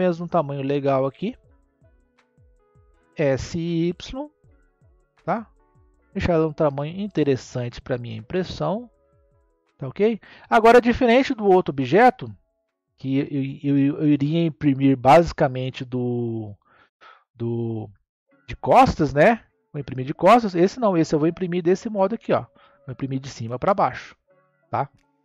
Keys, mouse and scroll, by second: 3.0 s, 7.6 click, 10.0-13.1 middle drag, 16.2 click, 16.9-19.3 middle drag, 19.3-19.7 scroll down 2, 19.7-22.8 middle drag, 25.0 scroll down 2.